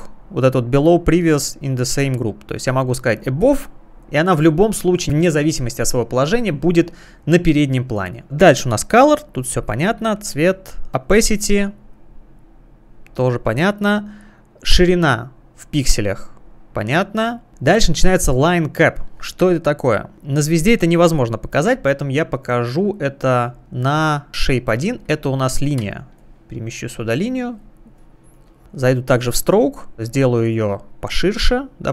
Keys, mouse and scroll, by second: 1.2 click, 3.4 click, 9.5 click, 10.4 Escape, 11.8 click, 12.9 click, 14.7 click, 17.3 click, 17.7 click, 23.6 click, 24.4 click, 26.2 click, 26.2 space, 26.9 space, 26.9 click, 28.0 space, 28.8 click, 31.1 click.